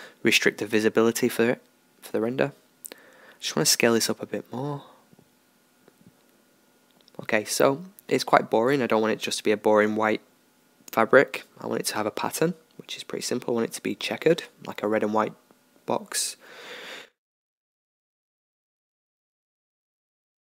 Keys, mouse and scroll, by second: 0.0 Escape, 1.7 Tab, 3.0 s, 5.2 Tab, 11.1-13.0 drag, 13.8-15.7 drag, 16.9-20.2 drag.